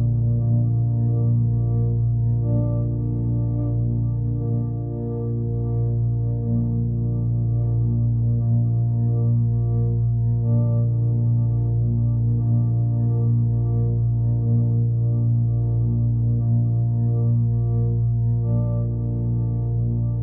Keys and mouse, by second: 0.6 ctrl+alt+click, 1.2 alt+drag, 1.9-2.9 alt+drag, 4.1 click, 4.7 alt+click, 6.0 click, 8.4-9.2 ctrl+alt+drag, 9.3 ctrl+alt+drag, 10.2-13.4 alt+shift+drag, 13.8 click, 15.0 ctrl+s, 15.9 click, 19.7-20.2 drag.